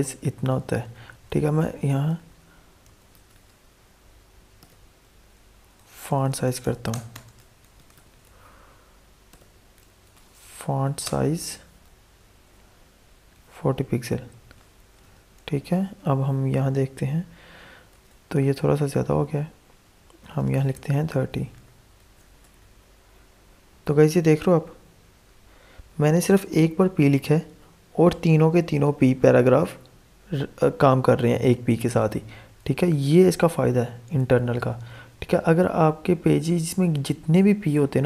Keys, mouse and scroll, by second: 0.6 alt+Tab, 1.6-3.1 typing, 4.3-5.6 typing, 7.0-9.7 typing, 10.6 Down, 11.0 Return, 13.0-15.4 typing, 15.7 alt+Tab, 16.6 F5, 17.9 alt+Tab, 20.1 click, 21.1 BackSpace, 21.2 3, 21.9 ctrl+s, 22.3 Tab, 22.9 F5, 31.0 F5, 31.1 alt+Tab, 34.1 click, 34.1-38.0 drag.